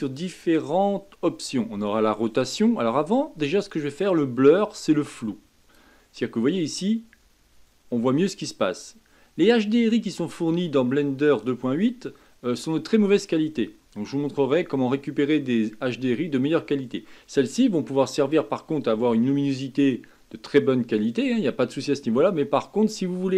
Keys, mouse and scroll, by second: 6.1-9.2 middle drag, 9.6-13.2 drag, 9.6-13.2 middle drag, 9.6-13.2 right drag, 13.5-16.5 middle drag.